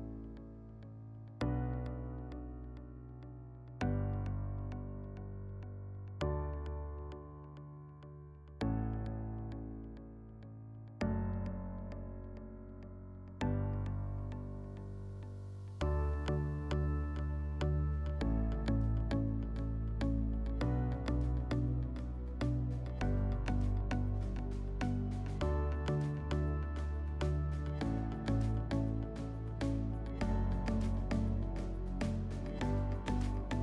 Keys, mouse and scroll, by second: 0.7 click, 0.8 click, 1.5 typing, 2.1 Return, 4.4 click, 5.0 click, 5.9 click, 6.1 click, 6.7-7.1 typing, 7.4 Return, 8.0 click, 8.4 click, 9.7 click, 10.8 click, 10.9 click, 11.6 typing, 12.1 Return, 13.6 click, 14.7 g, 15.0 g, 17.2-17.8 drag, 18.5 click, 18.6 click, 19.3-19.8 typing, 20.4 Return, 22.1 middle click, 23.3 click, 23.4 click, 24.2-24.6 typing, 25.1 Return, 26.9-27.9 drag, 28.0 middle click, 29.0 click, 29.0 scroll, 30.2 click, 31.0 click, 32.1 click, 32.3 click, 32.4 5, 32.9 click, 33.1 click, 33.2 5.